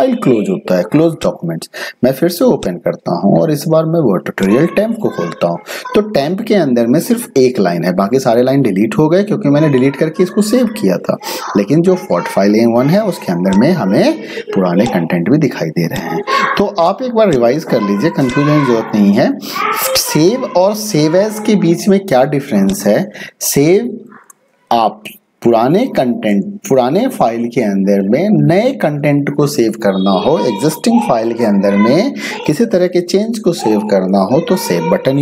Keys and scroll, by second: 24.6-27.9 typing.